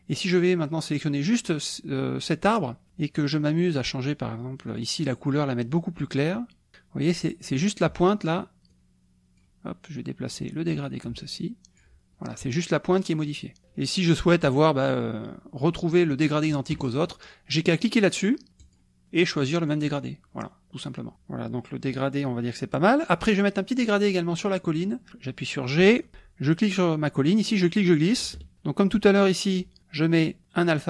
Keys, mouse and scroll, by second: 1.3 click, 4.7 click, 5.8-6.8 drag, 8.7 click, 10.4-12.0 drag, 13.1 click, 18.6 click, 19.8 click, 23.1 click, 24.7 click, 26.1 g, 27.6-28.6 drag, 30.4 click.